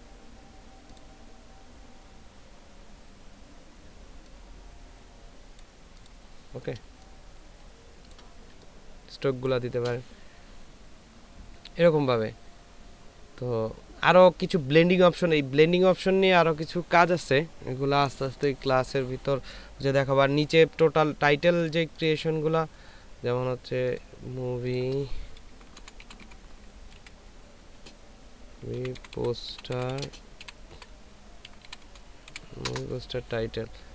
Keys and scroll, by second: 7.2 ctrl+space, 8.5 ctrl+space, 25.7-27.8 typing, 28.8-32.7 typing.